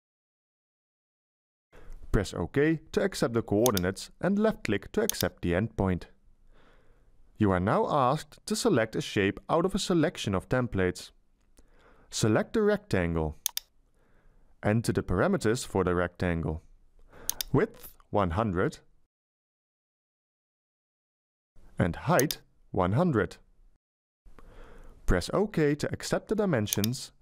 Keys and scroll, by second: 17.8-19.3 typing, 22.5-24.1 typing.